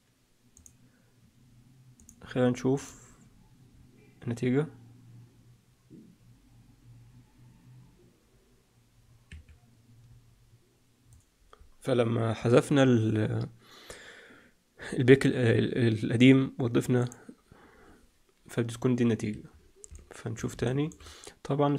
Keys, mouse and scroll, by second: 1.9 click, 2.7 click, 3.6-5.4 scroll up 2, 5.6-6.7 scroll up 1, 9.2 Escape, 16.9 click, 19.2 Escape, 19.8 middle click, 20.6 shift+middle click.